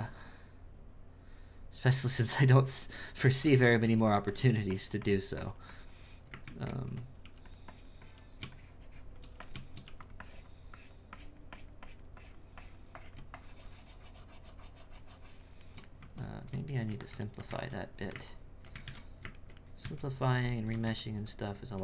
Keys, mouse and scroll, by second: 3.8 f, 4.3-6.4 drag, 6.4 ctrl+z, 6.6 ctrl+z, 7.7-9.3 drag, 9.8 f, 10.2-15.7 drag, 15.7 shift+middle click, 16.0 Tab, 16.7-18.8 shift+middle drag, 18.8 alt+a, 19.3 ctrl+middle click, 19.8 z, 20.8 a, 21.6 alt+a.